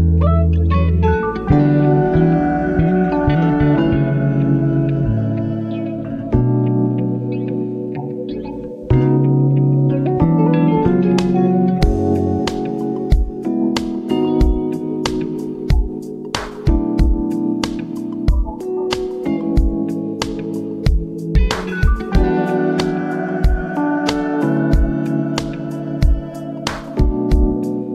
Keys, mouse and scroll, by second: 2.8 Up, 3.0 ctrl+click, 6.5 shift+click, 7.1 ctrl+alt+scroll down 1, 7.9 ctrl+alt+scroll down 1, 9.2 click, 10.2 shift+Right, 10.6 Return, 10.8 Right, 11.2 v, 11.3 Right, 13.7 click, 15.6 v, 15.8 Down, 17.1 shift+Right, 18.1 v, 18.4 shift+Right, 19.6-27.9 drag.